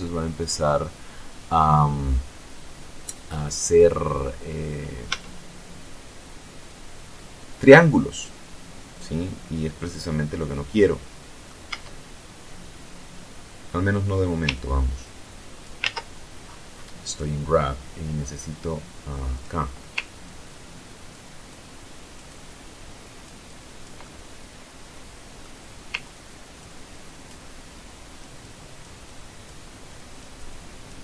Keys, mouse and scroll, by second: 4.5 Tab, 9.7-11.3 middle drag, 11.0 Tab, 13.9-15.1 ctrl+drag, 15.1 ctrl+z, 16.3 scroll up 2, 16.4 click, 18.7 click, 19.6-20.7 ctrl+drag, 20.9-22.7 ctrl+drag, 22.9-24.9 ctrl+drag, 25.2 ctrl+click, 26.2-28.3 ctrl+drag, 28.4 ctrl+click, 29.2-30.8 ctrl+drag, 30.9 ctrl+click.